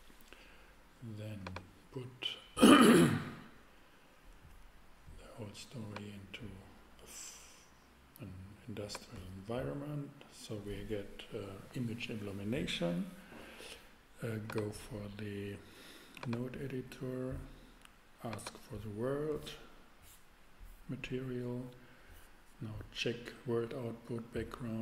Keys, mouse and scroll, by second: 1.4-2.9 drag, 3.2-5.9 middle drag, 7.4-8.9 drag, 14.5-16.3 drag.